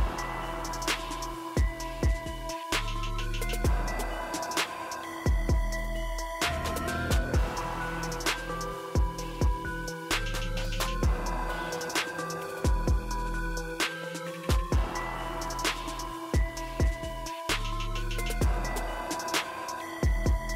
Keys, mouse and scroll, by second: 0.5 click, 4.0-5.5 drag, 6.5-8.7 drag, 9.8-10.7 drag, 14.3 click, 15.4-17.0 drag, 16.6 typing.